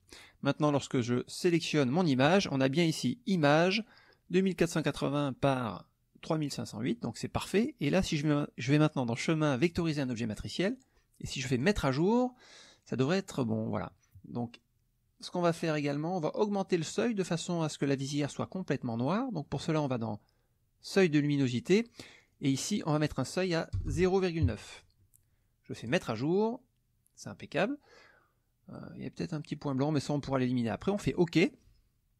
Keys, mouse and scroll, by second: 0.0 click, 0.6 click, 8.2 click, 9.6 click, 11.6 click, 21.9 click, 22.2 click, 22.7 click, 23.7 BackSpace, 24.4 KP_9, 25.8 click, 31.0 click.